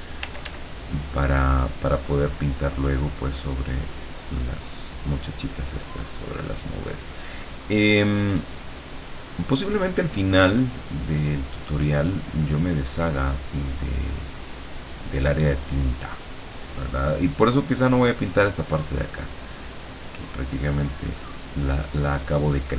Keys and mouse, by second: 0.3 d, 0.8-5.1 drag, 5.5 click, 6.7-8.1 drag, 8.5-17.0 drag, 19.7-22.6 drag.